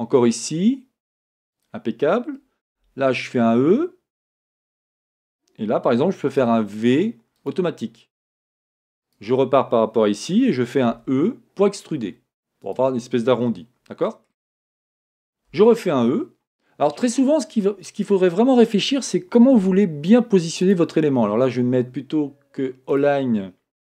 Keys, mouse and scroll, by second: 9.2 click, 11.0 e, 13.5-19.7 shift+middle drag, 15.6 e, 19.7 r, 23.1 click.